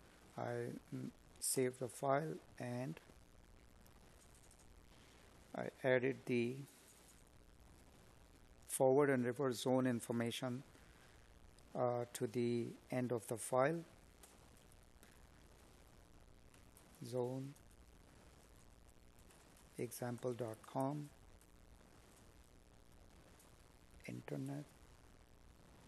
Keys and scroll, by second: 4.0 Up, 14.8 space, 20.1 space, 25.5 Left.